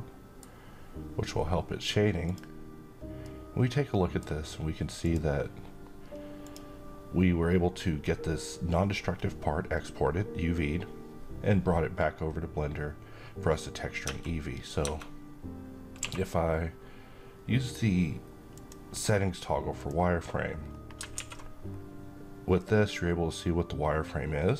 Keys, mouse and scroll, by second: 1.8 click, 2.7-4.0 middle drag, 4.5 click, 13.5 Tab, 15.5 q, 18.0 click, 20.2-20.5 scroll up 1, 20.7 alt+a, 21.2-22.1 scroll down 1, 22.1-24.5 middle drag.